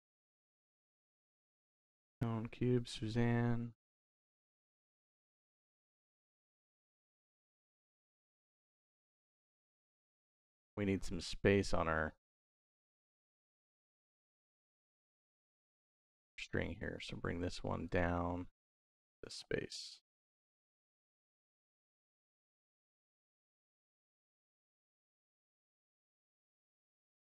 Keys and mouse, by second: 0.6 n, 2.6-7.1 drag, 11.8 middle click, 12.4 middle click, 14.4 middle click, 16.8-17.7 drag, 18.4-19.7 drag, 20.4 middle click, 20.9 middle click, 21.7 middle click, 26.1 click, 26.6 click.